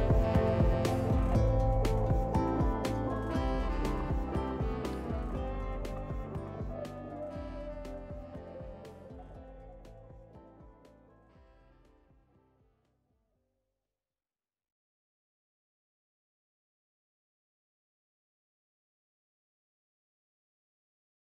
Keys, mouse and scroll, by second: 0.2 click, 1.2 ctrl+a, 3.1-3.6 scroll down 3, 3.6-4.9 middle drag, 4.9 click, 5.4 ctrl+a, 6.6 middle click, 7.4 Tab, 8.2-9.5 drag, 9.5 middle click, 10.3-10.8 scroll down 2, 10.8 click, 11.6-12.0 scroll up 3, 12.0-13.9 drag, 13.9 scroll down 1, 14.1 middle click, 14.4-15.2 scroll down 1, 15.2 middle click, 15.6 scroll up 2, 15.8-16.3 scroll down 4, 16.3 middle click, 16.9 click, 17.7-19.0 shift+middle drag, 19.0 click, 19.3-19.6 scroll up 2, 19.6 scroll down 1, 19.9 click, 20.2 click.